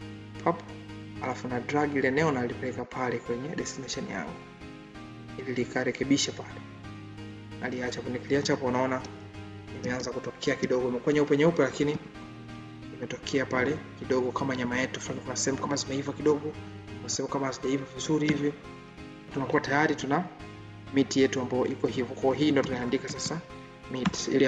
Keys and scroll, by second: 8.2 ctrl+d.